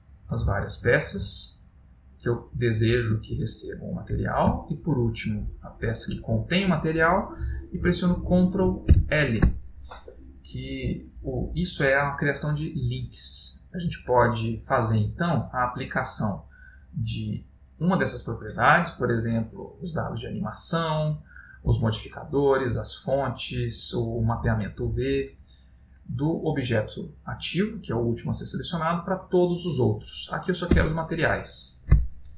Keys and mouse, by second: 1.1 shift+click, 2.6 shift+click, 2.7 shift+click, 3.5 middle click, 4.9 shift+click, 9.1 ctrl+l, 21.5 Down, 24.0 Up, 24.5 Down, 25.0 Up, 26.1 Up.